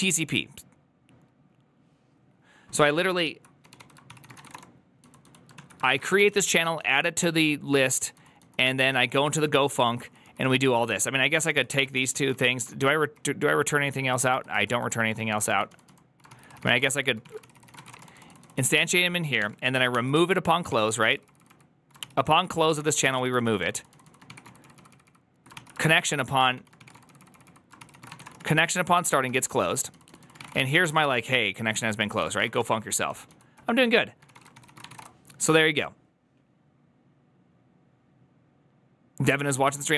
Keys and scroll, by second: 3.8-6.7 typing, 5.4 ctrl+o, 7.8 typing, 8.9-12.2 typing, 12.6 ctrl+d, 12.7 ctrl+d, 13.6 ctrl+d, 14.4 ctrl+u, 14.9-35.2 typing, 16.3 ctrl+c, 19.8 ctrl+c, 32.0 ctrl+c.